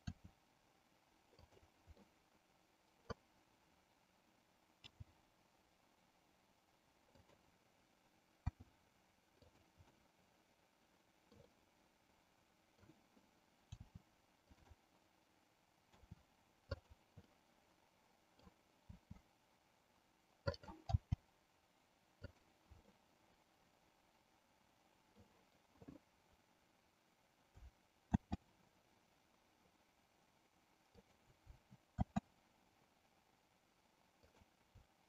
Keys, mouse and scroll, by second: 0.2 r, 1.4 click, 2.2 middle click, 4.8 g, 7.3 click, 8.5 s, 9.9-11.4 middle drag, 11.6-13.0 middle drag, 13.8 r, 14.7 click, 15.9 r, 17.4-18.5 middle drag, 18.9 r, 21.1 g, 22.4 click, 22.9-25.3 middle drag, 28.2 shift+d, 32.2 shift+d.